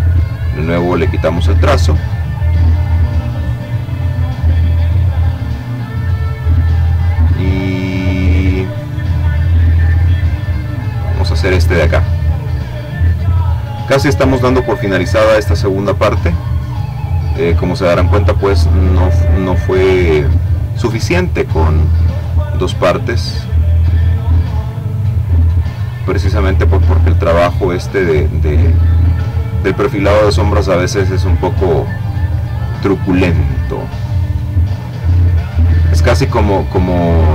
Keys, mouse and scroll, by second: 2.4-6.7 middle drag, 3.1 click, 9.5 click, 14.2 click, 16.2-18.1 drag, 18.7 click, 20.7-22.9 drag, 23.3 click, 24.4-28.5 drag, 28.9-29.9 drag, 30.3-31.3 drag, 36.7-37.3 drag.